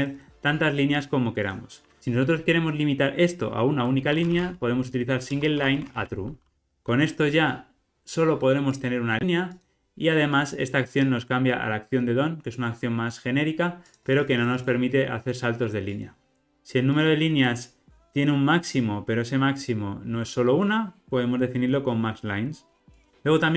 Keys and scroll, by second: 5.3 Return, 6.5 ctrl+r, 17.0 super+b.